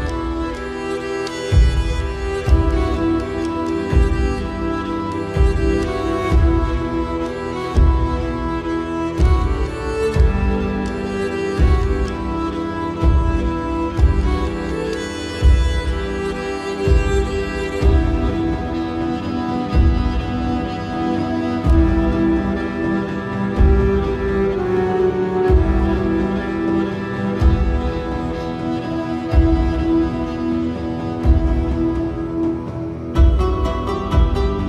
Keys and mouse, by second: 8.2 middle click, 9.7 click, 10.7 KP_1, 17.0 g, 20.3 shift+middle click, 26.5-33.1 middle drag.